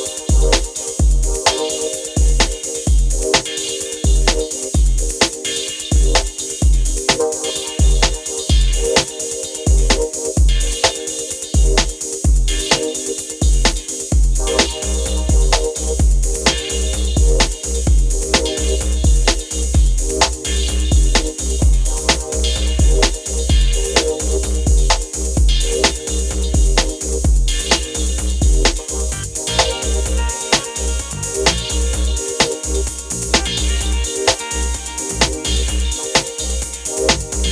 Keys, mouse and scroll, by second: 1.2-2.7 alt+scroll down 2, 2.8-3.9 alt+scroll up 2, 3.9-4.3 alt+scroll up 1, 4.3 space, 4.4-4.9 drag, 9.0 shift+click, 11.2 ctrl+a, 12.7-15.9 typing, 17.2 typing, 18.6 click, 25.9-29.7 drag, 30.4 ctrl+t, 31.4-35.8 drag, 36.4-37.3 alt+scroll down 1.